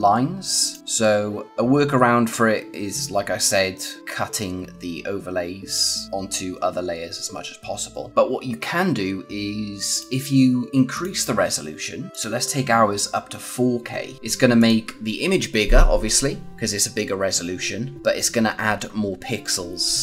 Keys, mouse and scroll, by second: 0.6 click, 0.8 scroll down 1, 8.1 click, 9.8 click, 14.1 click.